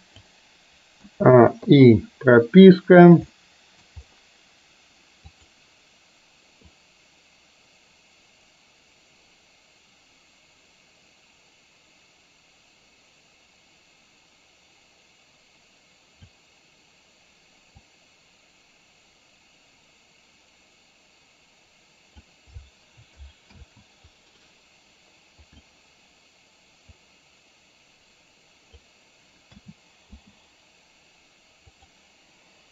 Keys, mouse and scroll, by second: 1.0 a, 1.8 i, 3.4 middle click, 5.4 click, 6.8-16.4 drag, 17.9 click, 18.2-22.3 drag, 23.7 ctrl+z, 26.9-28.9 drag, 29.7 a, 30.3 i, 31.8 click.